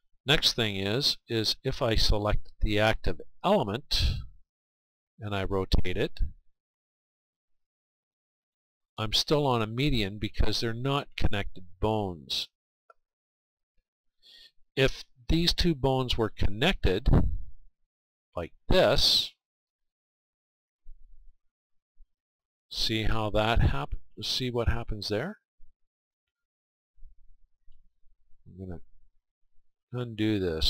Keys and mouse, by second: 0.1-2.2 drag, 6.1 r, 13.2-15.1 right drag, 17.8-25.2 drag, 25.2-27.1 right drag, 27.0-29.6 drag, 29.6 ctrl+z.